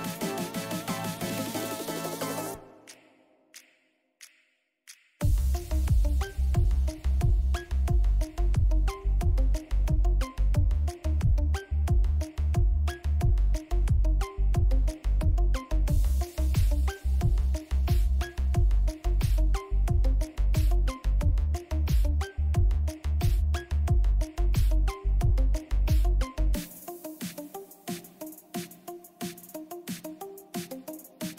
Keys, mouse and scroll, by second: 13.2 ctrl+-, 14.9 ctrl+=, 16.1-19.3 drag, 20.1 ctrl+=, 20.9 click, 26.0 click, 26.4 ctrl+=, 28.8 click, 29.9-31.3 drag.